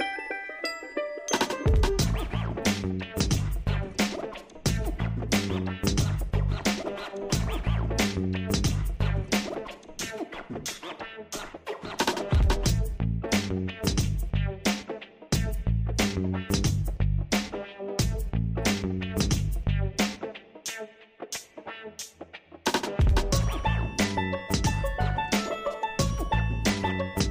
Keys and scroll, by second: 21.6 alt+Delete.